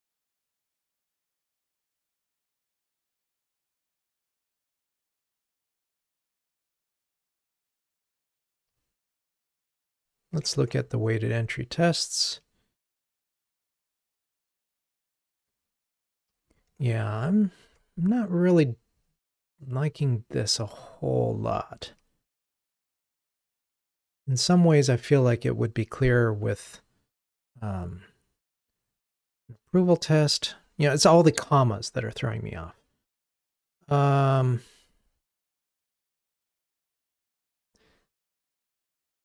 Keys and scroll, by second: 9.3 ctrl+Tab, 16.8 ctrl+Tab.